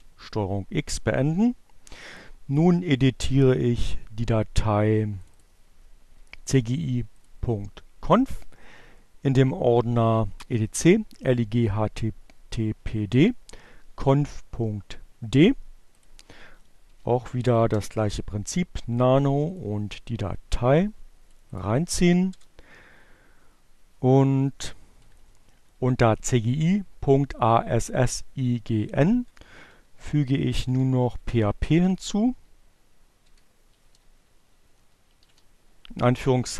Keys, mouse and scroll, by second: 2.0-3.2 drag, 4.4 click, 5.6 click, 6.4 click, 15.3 click, 15.6-17.1 typing, 18.2 click, 19.8-21.3 drag, 22.0 Return, 22.6 Down, 24.1 Up, 27.2 Left, 27.3 Down, 29.7 ,, 29.9 Return, 30.5 Tab, 32.3 Left, 32.4 space, 33.0 shift+2, 34.8-36.1 typing.